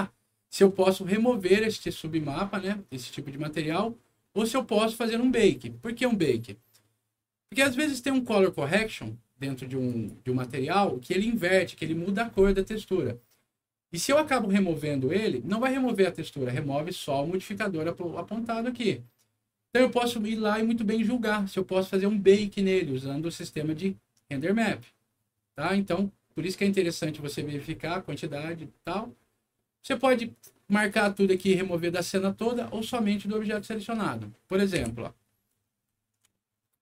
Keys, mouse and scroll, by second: 0.2 scroll up 1, 6.4 middle click, 9.8 click, 23.3 click, 25.5 click, 30.8 click, 31.3 click, 34.2 middle click, 34.7 p, 35.1-36.0 scroll down 3, 36.3 alt+middle click.